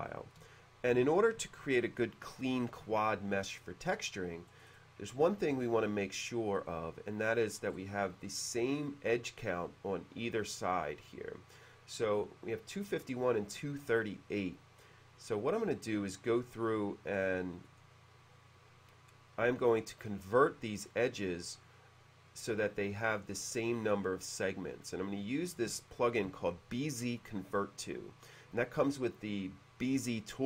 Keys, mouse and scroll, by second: 4.6-5.0 scroll up 2, 6.3 click, 6.5 click, 6.7 click, 7.8-8.1 scroll down 2, 10.5 click, 10.7 click, 10.9 click, 17.7 right click.